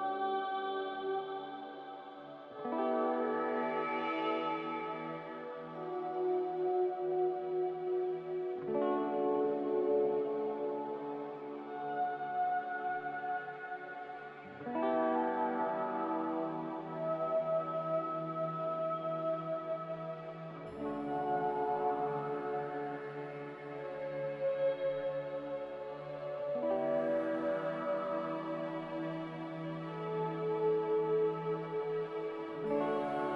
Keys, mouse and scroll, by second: 13.6 b, 14.8 ctrl+b, 16.2 ctrl+b, 16.6 a, 21.4 5, 21.5 Return, 22.5 1, 22.6 Return, 27.5 z, 29.2 3, 29.4 Return, 30.9 b.